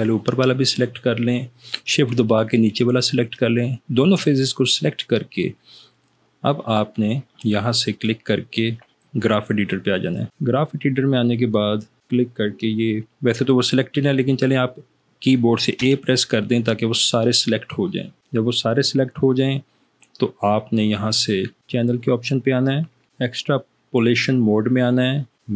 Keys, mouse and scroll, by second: 16.0 a, 21.7 click.